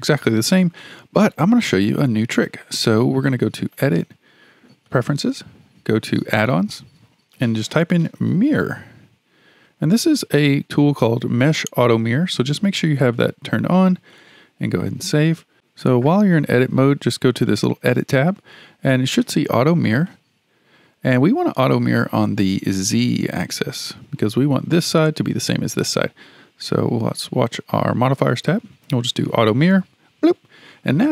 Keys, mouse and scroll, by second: 3.7-6.8 drag, 17.5 click, 20.1-22.3 drag, 27.7 click, 29.4-31.1 drag.